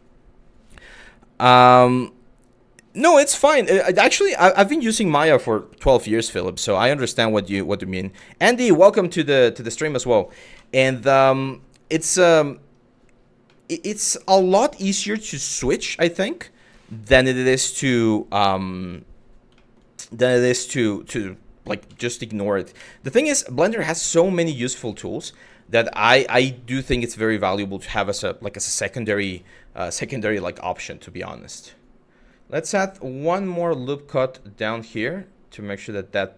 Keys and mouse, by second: 1.7-2.2 middle drag, 6.4 middle click, 9.0-9.4 middle drag, 10.1 KP_Divide, 11.0 middle click, 11.6 KP_Divide, 13.2 middle drag, 14.2 middle click, 14.7 click, 15.8 middle click, 19.2 shift+middle drag, 19.8-20.2 middle drag, 21.5 KP_3, 22.4 KP_1, 23.3 shift+middle drag, 24.3 shift+middle drag, 25.6-25.9 shift+middle drag, 30.0 Tab, 32.6 click, 33.8 click.